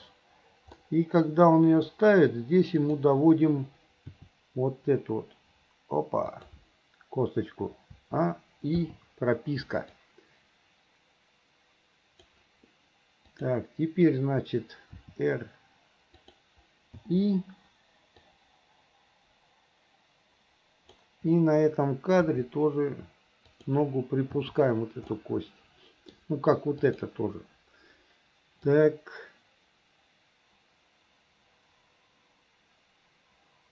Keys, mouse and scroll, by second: 0.8-1.9 middle drag, 2.8 click, 4.2 r, 8.0 a, 8.8 i, 10.0-12.4 drag, 13.4 click, 15.0 r, 17.0 i, 18.3-21.0 drag, 22.2 r, 24.4 i, 25.2-26.2 middle drag, 26.8 click, 28.7-33.7 drag.